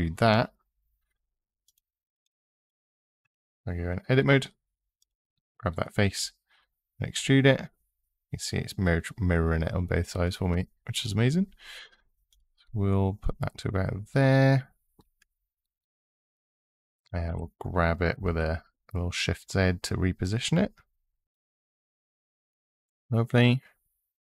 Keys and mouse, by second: 0.0 e, 1.9 click, 3.0 Tab, 4.8 click, 6.0 e, 12.1 click, 17.1 g, 18.0 shift+z, 21.6 click.